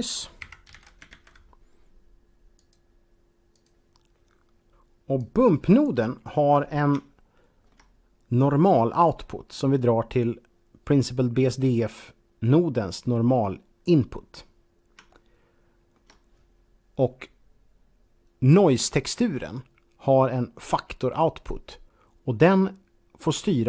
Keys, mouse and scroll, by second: 0.3-1.0 typing, 2.5 click, 3.6 click, 5.0 click, 5.5 click, 6.1 scroll up 1, 7.0 shift+middle click, 8.9-14.1 drag, 15.2 shift+middle click.